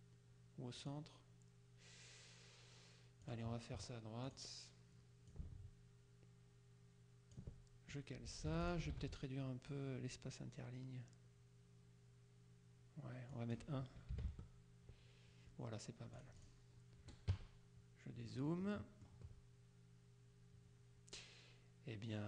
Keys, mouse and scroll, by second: 0.9 click, 3.3 click, 4.4 click, 5.4-7.9 ctrl+drag, 8.6 t, 8.7 ctrl+click, 9.0 ctrl+a, 13.4 click, 14.2 KP_1, 14.3 Tab, 16.3 click, 17.4 KP_Subtract, 18.5-19.6 drag.